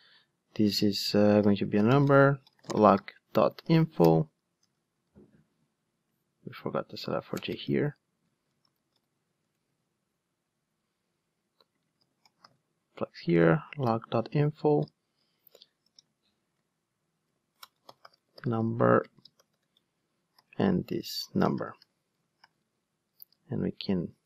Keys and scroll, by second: 9.5 Return, 22.6 alt+super+l, 23.2 super+d.